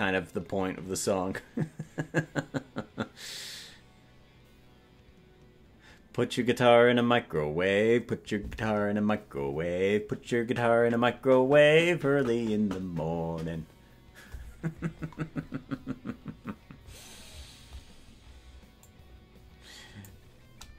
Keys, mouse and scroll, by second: 18.8-20.1 drag.